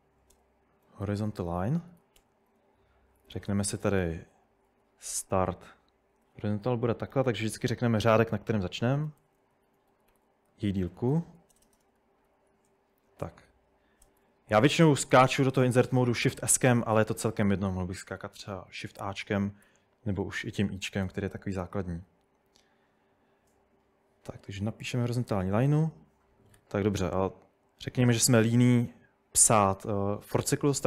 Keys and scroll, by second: 0.0-4.9 typing, 7.4-12.3 typing, 14.2 shift+s, 16.2-19.6 typing, 19.1 Escape, 21.1 Tab, 24.9-25.9 typing, 26.6 Escape, 27.0 u.